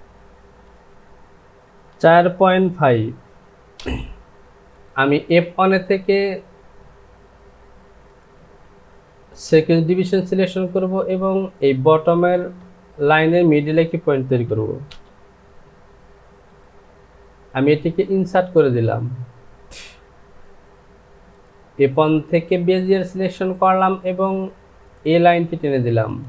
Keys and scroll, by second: 1.9 KP_4, 2.9 KP_Decimal, 3.8 Return, 14.6 KP_2, 14.9 Return.